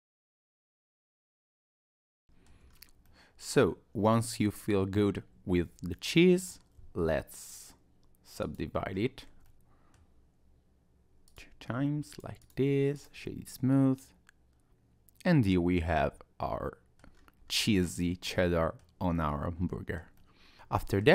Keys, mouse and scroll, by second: 0.0-1.7 typing, 0.0 click, 0.2 click, 0.6 click, 0.8 click, 1.1 middle click, 1.4 click, 1.4 middle click, 1.9 middle click, 2.1 click, 2.2 middle click, 2.5 Tab, 2.7-3.0 scroll down 3, 3.0 middle click, 7.4 click, 8.9-9.5 scroll up 3, 9.5 middle click, 11.3 click, 12.1 right click, 12.9 click, 13.3 middle click, 17.1-17.7 scroll down 3, 17.7 middle click, 19.1 middle click, 20.2 middle click, 20.5-21.1 scroll up 1.